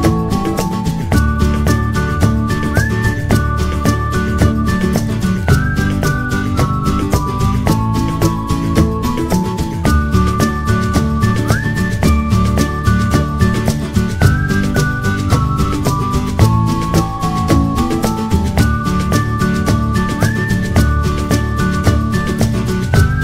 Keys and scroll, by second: 6.6 Return, 10.9 typing.